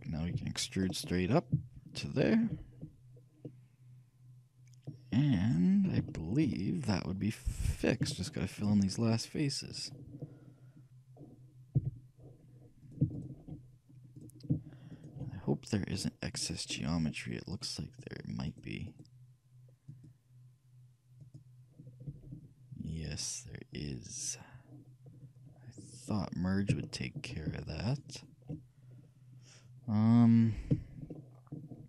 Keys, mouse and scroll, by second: 0.5 e, 3.1 middle click, 3.7-5.0 middle drag, 5.5-7.7 middle drag, 11.8 f, 12.9-17.0 shift+right drag, 16.7 shift+middle click, 17.6-23.0 shift+right drag, 22.2 g, 25.9-28.1 middle drag, 28.1-29.9 shift+right drag, 31.2-31.8 shift+middle drag.